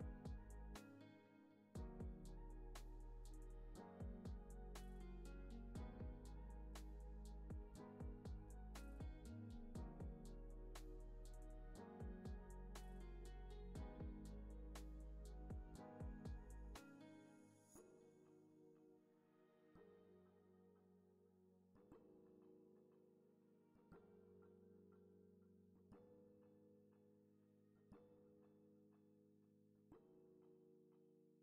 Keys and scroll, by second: 0.3 space, 15.8 super+c, 16.0 z, 16.9 super+v, 19.5 space, 21.2 space, 26.6 z, 27.0 x, 28.1 super+-, 29.6 space.